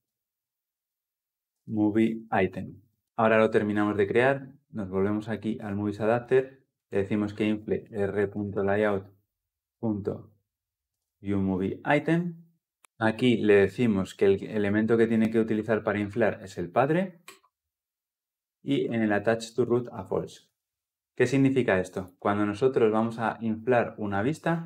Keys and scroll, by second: 12.6 Return, 13.1 ctrl+p, 20.5 Return.